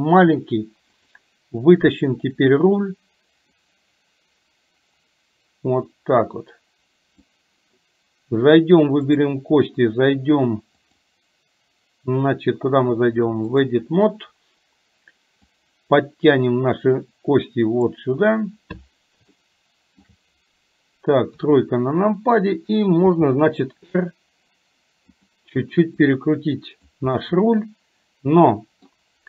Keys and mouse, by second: 0.6 click, 3.6-7.3 drag, 9.2 click, 10.8-13.8 drag, 15.6-18.0 drag, 19.3 shift+middle click, 21.3 KP_3, 23.2 r, 26.3 click, 27.2-29.0 middle drag.